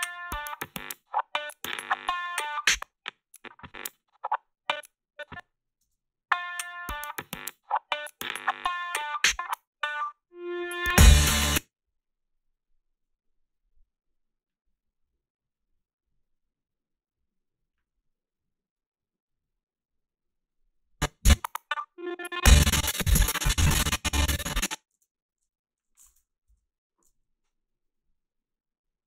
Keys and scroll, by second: 2.6 space, 5.8 space, 11.3 space, 24.9 ctrl+z.